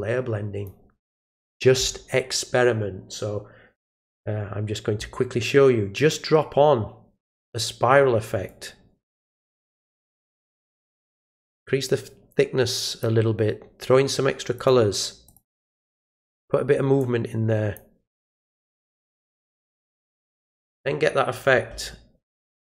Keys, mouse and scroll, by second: 5.9-7.3 drag, 8.4 click, 10.7 click, 14.5 click, 15.2 click, 17.0 click, 18.4 click, 20.6 click, 22.3 click.